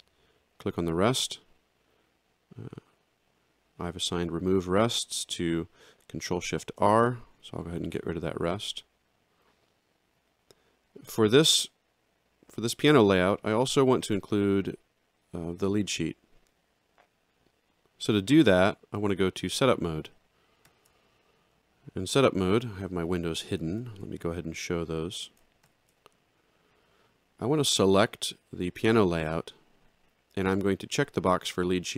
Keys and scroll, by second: 6.6 ctrl+shift+r, 20.7 ctrl+1, 23.8 ctrl+7, 25.6 ctrl+9.